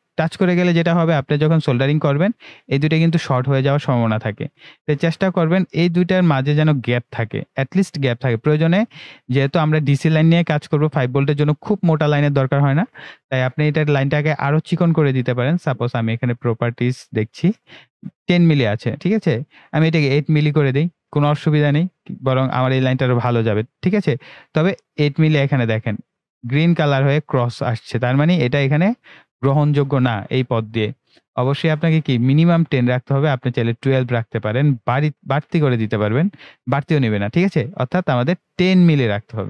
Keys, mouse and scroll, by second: 1.4 ctrl+scroll down 1, 4.6 ctrl+scroll down 1, 9.0 click, 16.5-22.1 drag, 24.6 click, 25.9-28.3 ctrl+scroll up 1, 29.6-29.9 ctrl+scroll down 1, 31.9 click, 38.3 click.